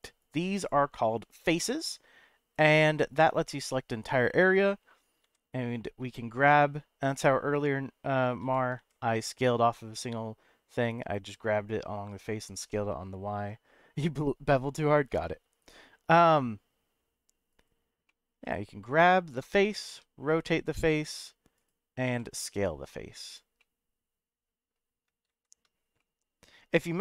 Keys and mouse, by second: 0.3 click, 0.6 click, 1.3 click, 1.6 middle click, 2.5 click, 3.5 middle click, 5.2 g, 7.0 right click, 8.4 g, 8.8 y, 17.5 right click, 18.1 middle click, 19.9 r, 21.5 right click, 22.0 s, 23.3 click, 23.6-24.7 middle drag, 25.3 ctrl+z, 26.0 middle click.